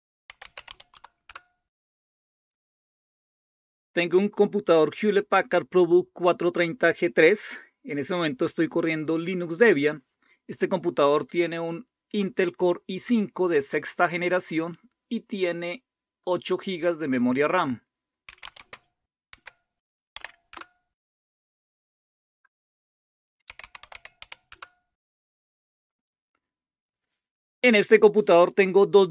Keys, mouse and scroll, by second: 0.0-1.1 typing, 1.2 Return, 18.0-20.5 typing, 23.3-24.7 typing.